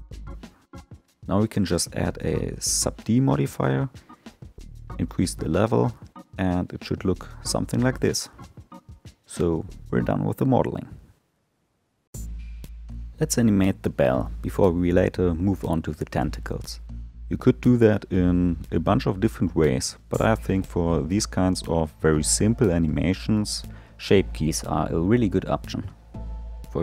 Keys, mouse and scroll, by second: 0.3 click, 2.3-3.4 drag, 4.7-6.4 drag, 6.4-9.4 middle drag.